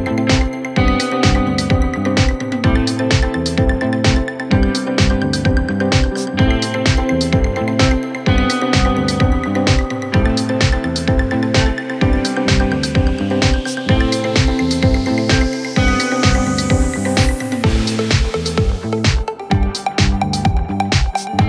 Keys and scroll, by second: 9.6 Delete.